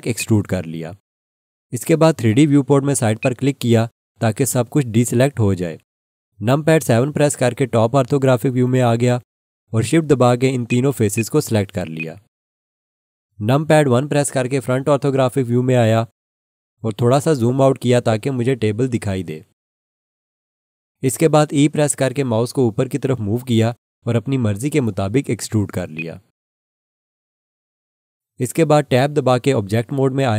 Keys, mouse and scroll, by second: 0.1 click, 3.2 click, 7.0 KP_7, 10.6 shift+click, 11.1 shift+click, 11.9 shift+click, 14.5 1, 17.3 scroll down 1, 21.8 e, 25.9 click, 29.3 Tab.